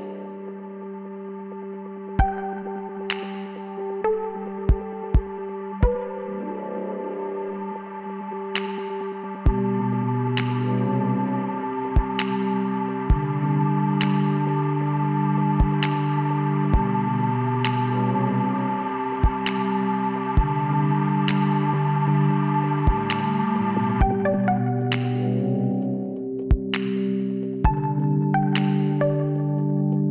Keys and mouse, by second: 2.1 middle click, 2.9-4.5 drag, 3.6 b, 5.5-7.4 drag, 7.8-9.5 drag, 7.9 b, 9.8 click, 11.9 middle click, 12.4 z, 12.9 middle click, 15.8 ctrl+KP_Add, 17.1 s, 22.6 click, 24.8-26.2 middle drag, 26.6 click, 27.0-28.2 middle drag, 28.8 click, 29.3 middle click, 29.5 click.